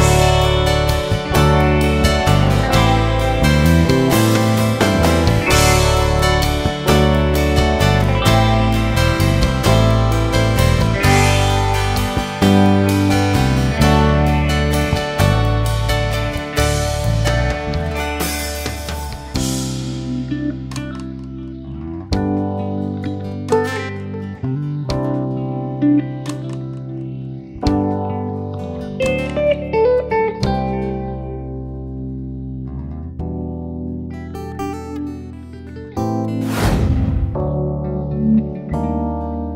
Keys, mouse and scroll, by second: 0.1 shift+middle click, 0.6-1.1 scroll up 2, 1.1-1.7 scroll up 3, 1.7-3.0 shift+middle drag, 3.0 click, 6.1 click, 6.8 shift+middle click, 7.4-7.7 scroll up 1, 7.7 e, 15.8 scroll down 1, 16.1 Tab, 16.3 scroll down 1, 16.6 alt+a, 16.9-19.1 middle drag, 19.1 click, 19.8 KP_3, 20.4 scroll up 2, 20.7 shift+middle click, 21.7 click, 24.6 alt+a, 25.0 KP_1, 26.8-27.4 scroll up 1, 27.4 click, 27.6 scroll up 2, 28.1 shift+middle click, 28.8 scroll up 2, 29.0 Tab, 30.1 click, 30.6 shift+middle click, 31.5 click, 32.0-32.4 scroll down 2, 32.4 shift+middle click, 32.7 shift+scroll up 1, 32.9-33.5 scroll down 2, 33.5-34.5 scroll up 1, 34.5 click, 39.0 scroll down 1, 39.3 shift+middle click.